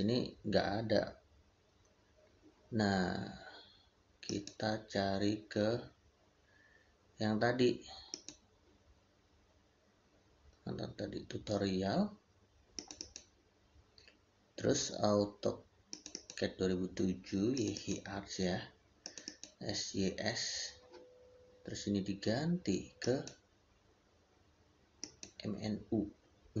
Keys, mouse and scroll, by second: 4.1 click, 5.1 click, 8.0 click, 12.6 click.